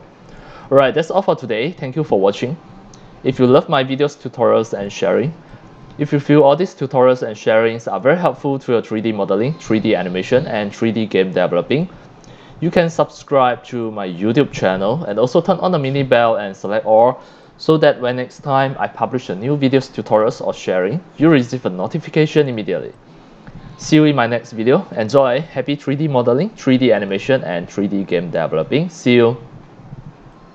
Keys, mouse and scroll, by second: 3.2-3.9 drag, 4.1 middle click, 4.4 scroll down 1, 4.7 x, 4.8-5.2 drag, 5.2 c, 5.5-8.0 drag, 8.3 scroll up 2, 8.9 x, 9.0 click, 10.8 click, 11.8-12.8 drag, 13.7 c, 13.8-14.3 drag, 14.5 scroll down 1, 15.0 c, 15.1-15.9 drag, 16.2 scroll down 1, 16.4 x, 16.6-17.0 drag, 17.3 c, 17.4-18.1 drag, 18.6-19.0 drag, 19.2 x, 19.3-20.2 drag, 19.8 c, 20.7 scroll up 1, 21.3-22.5 drag, 21.3 x, 21.8 c, 22.9 x, 22.9-23.7 drag, 24.7 middle click, 25.1-29.0 drag, 29.2 click.